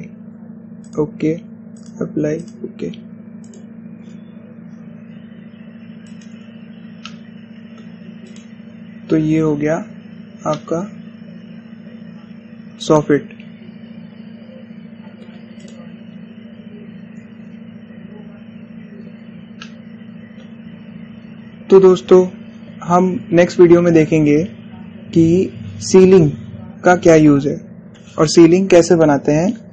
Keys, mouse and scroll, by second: 0.2 click, 5.1 scroll down 1, 7.3-7.7 scroll down 1, 7.8-9.1 shift+middle drag, 9.1 click, 9.5-10.1 scroll up 1, 11.2 scroll down 1, 11.3-16.4 shift+middle drag, 16.4 click, 16.8 scroll down 1, 20.4-23.4 middle drag.